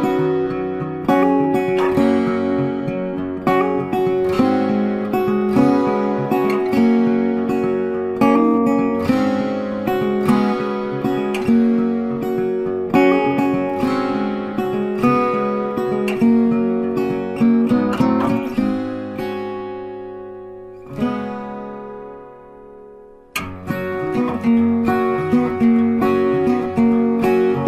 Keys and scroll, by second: 0.5 ctrl+c, 0.6 ctrl+f, 10.6 ctrl+c, 10.7 ctrl+f, 25.7 ctrl+z.